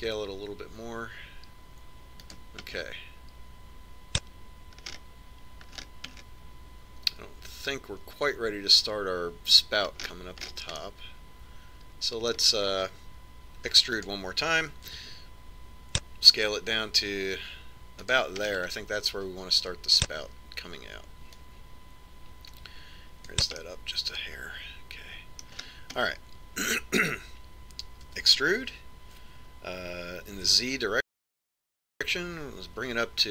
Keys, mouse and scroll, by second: 1.8 s, 4.5-6.6 middle drag, 6.7-10.0 middle drag, 11.9-14.4 middle drag, 14.4 middle click, 15.6 e, 16.8 s, 20.4-22.2 middle drag, 23.3 click, 25.5-27.5 middle drag, 27.5-29.9 scroll down 1, 29.9 scroll down 1, 30.0 e.